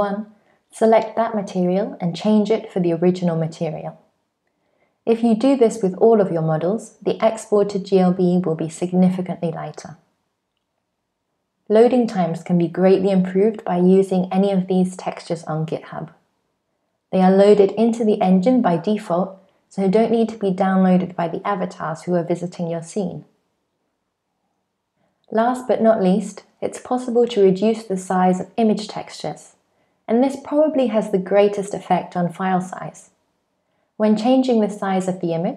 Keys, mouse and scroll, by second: 2.0-3.2 scroll down 4, 3.2 click, 4.4 click, 5.6 click, 6.2 scroll down 3, 6.4 click, 6.7 click, 7.4 click, 8.2 click, 8.4 click, 9.0 click, 9.2 click, 9.7-10.3 scroll down 7, 10.1 click, 10.3 click.